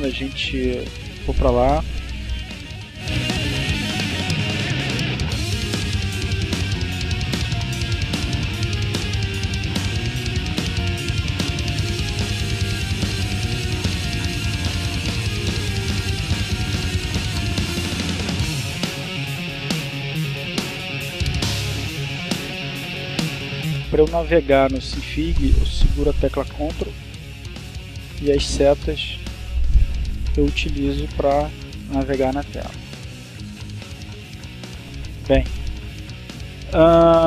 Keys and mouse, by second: 0.7-5.9 drag, 6.0 click, 7.3 click, 8.0 click, 9.5-10.5 drag, 10.8-12.0 drag, 14.0-15.9 ctrl+shift+drag, 19.2 -, 21.7 ctrl+Down, 22.2 ctrl+Right, 23.6 Right, 24.0 Up, 24.3 Down, 27.0 Right, 27.6 Left, 28.4 Right, 29.0 Left, 30.0 Down, 32.7 click.